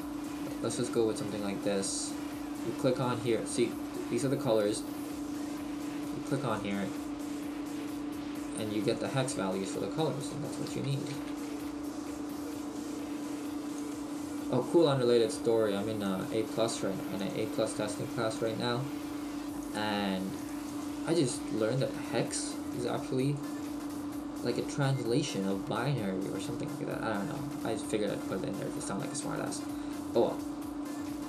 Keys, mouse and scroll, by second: 16.1 click, 28.8 middle click.